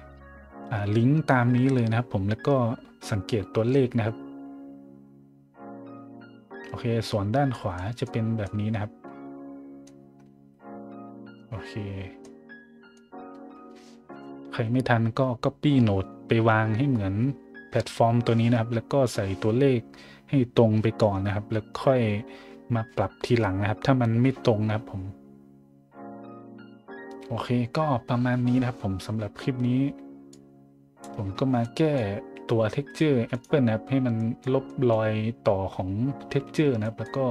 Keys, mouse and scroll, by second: 7.0 middle click, 7.8 middle click, 8.4-9.8 middle drag, 12.2-12.9 middle drag, 30.3 click, 31.3 scroll down 1, 31.6-31.9 scroll up 1, 32.7 middle drag, 33.3 right click, 34.2 middle drag, 34.6 middle drag, 36.3 a, 36.8 middle drag.